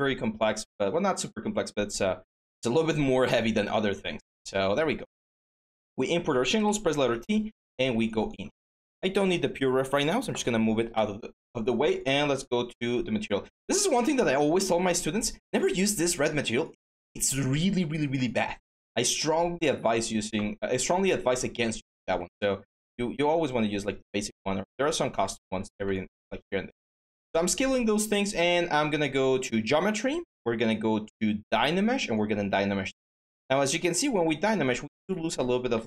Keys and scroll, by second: 6.5-7.3 typing, 22.9 r, 25.2 q, 35.5 ctrl+z.